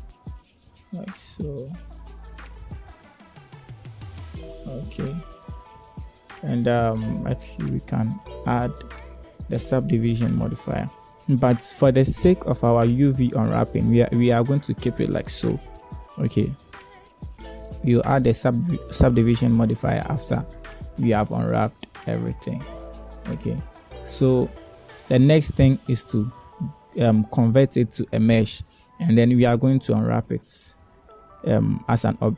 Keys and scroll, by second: 0.5 Tab, 4.9 Tab.